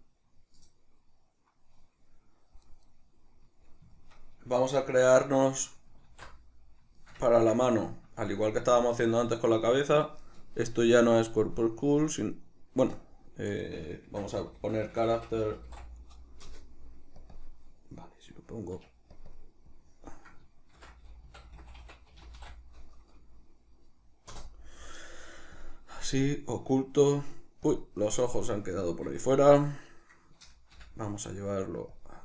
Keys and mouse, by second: 2.9 middle click, 4.2-11.3 middle drag, 6.1 alt+q, 11.4-17.2 drag, 16.5 Return, 17.3 click, 19.1 click, 19.3-25.7 drag, 24.4 Return, 26.3 click, 28.7 right click, 29.9 right click, 30.7 m.